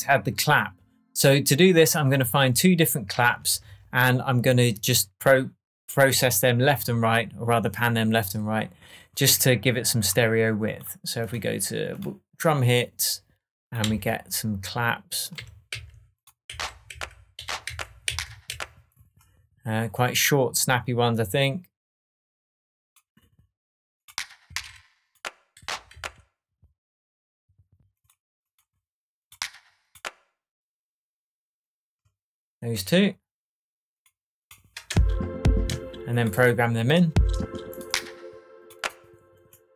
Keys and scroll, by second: 3.6 shift+Tab, 13.8 Left, 15.3 Right, 15.7 Down, 17.3 Up, 17.6 Down, 18.4 Up, 24.4 Down, 25.5 Up, 25.9 Down, 34.8 space, 37.1 space.